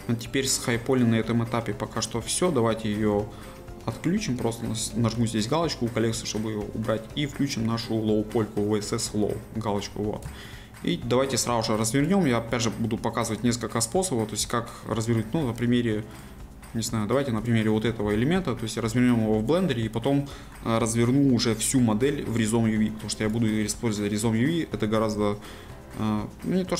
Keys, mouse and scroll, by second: 3.1 a, 6.1-9.2 drag, 9.3-10.5 drag, 10.5 shift+middle click, 11.1-12.0 scroll up 1, 12.0 click, 12.3-12.7 scroll down 1, 12.7-14.1 middle drag, 14.1-14.6 scroll up 1, 14.6-16.2 shift+middle drag, 16.2-18.1 drag, 18.1 g, 19.5 right click, 25.8-26.7 middle drag.